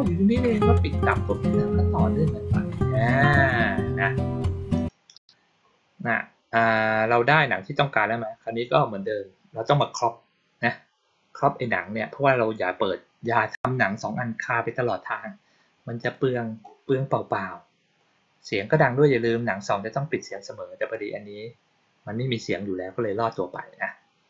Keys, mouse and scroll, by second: 4.7 click, 9.6 click, 13.1 click, 15.9 click, 20.7 click.